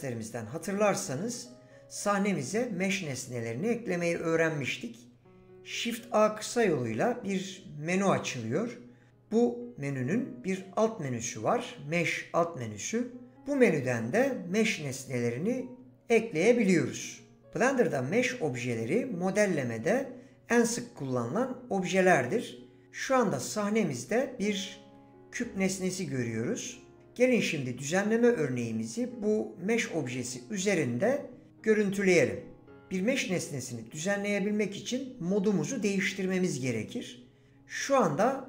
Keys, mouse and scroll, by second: 6.6 shift+a.